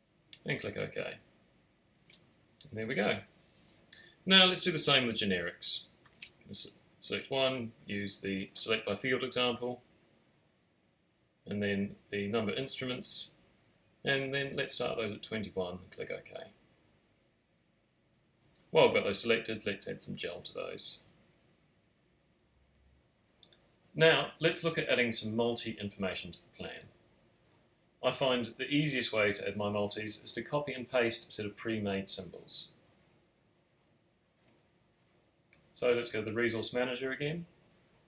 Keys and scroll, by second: 6.6 alt+shift+super+s, 7.5 Return, 10.2 alt+shift+super+n, 12.2-13.9 typing, 20.5-21.7 typing, 30.2 space.